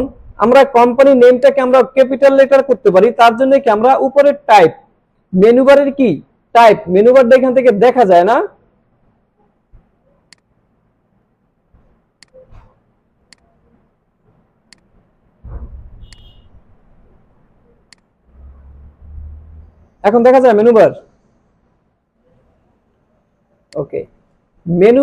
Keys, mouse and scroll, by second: 1.4 click, 1.5 click, 10.3-11.5 drag, 12.2-12.8 drag, 17.9-22.3 drag, 23.1 alt+scroll down 1, 23.5 space, 23.7-24.3 click, 24.0 space.